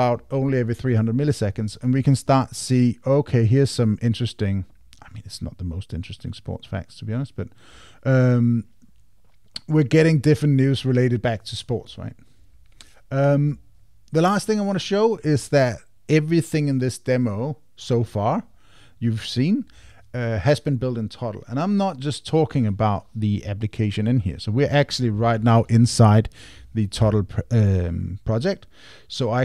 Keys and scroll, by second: 27.0 super+k.